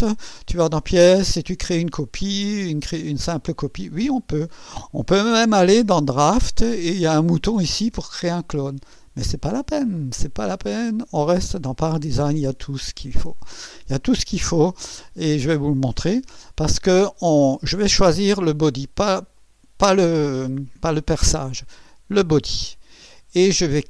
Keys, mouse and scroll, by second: 0.5 click, 3.8 click, 5.2 click, 5.9 click, 10.6 click, 11.8 click, 13.3 click, 19.3 click, 22.5 click.